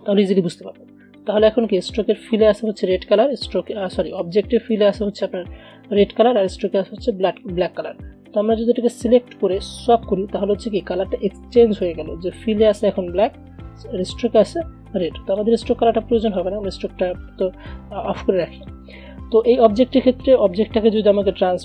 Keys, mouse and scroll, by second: 1.3 click, 8.4-10.0 drag, 15.5-21.6 drag.